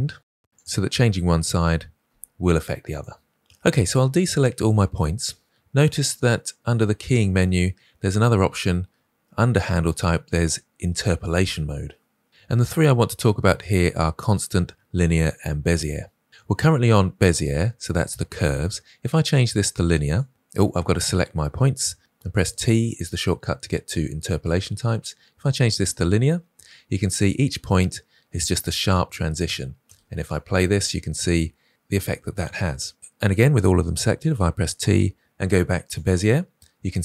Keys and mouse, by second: 0.2 v, 0.5 click, 2.0 g, 7.1-20.1 drag, 20.7 a, 22.0 t, 29.8 space, 34.1 t.